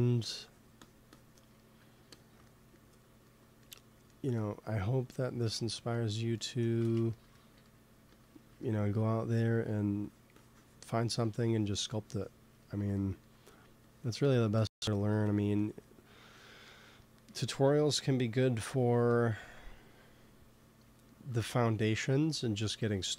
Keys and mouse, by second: 2.7-4.0 drag, 6.7 shift+c, 7.9 f, 9.4 f, 10.1-13.7 drag, 13.7 middle click, 13.8-16.9 drag, 17.2 ctrl+s, 18.8 KP_1, 22.5 g, 22.7 f.